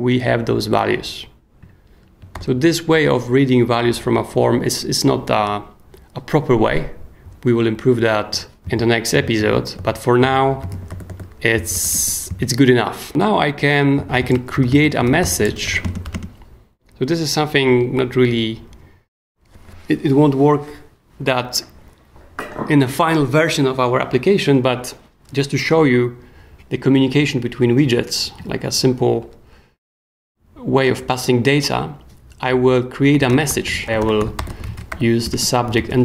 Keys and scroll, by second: 2.3 super+j, 8.6 k, 9.1 b, 10.4-16.5 typing, 32.9-36.0 typing.